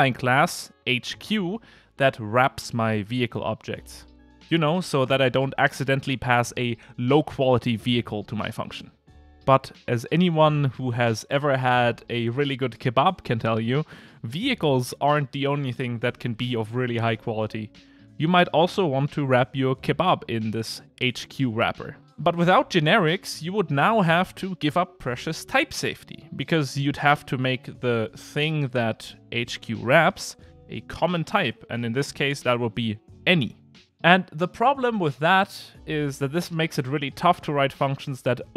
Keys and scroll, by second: 23.2 alt+Up.